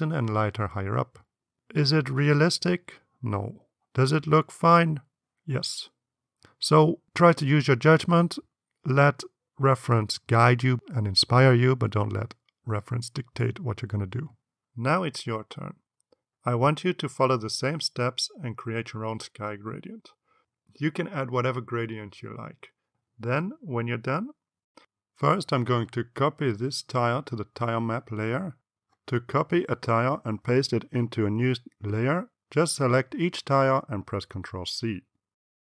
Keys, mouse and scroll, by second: 26.4 click, 27.9-28.6 drag.